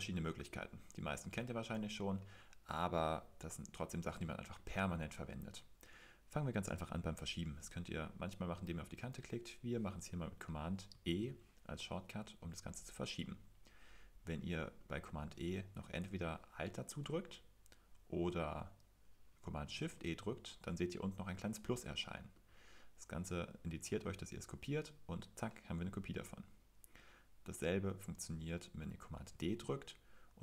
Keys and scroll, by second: 0.0-1.0 typing, 2.4 typing, 4.0-4.8 typing, 11.1 super+e, 15.9 super+e, 17.9 Escape, 19.7 shift+super+e, 29.3 super+d.